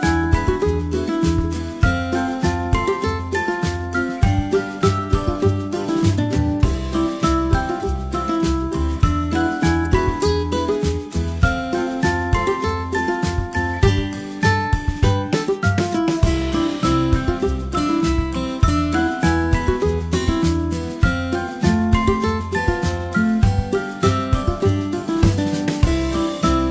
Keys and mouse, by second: 0.9 Left, 1.1 Left, 3.0 a, 7.0 middle click, 9.9 g, 12.2 g, 18.9 a, 19.2-19.9 middle drag, 22.4 ctrl+s.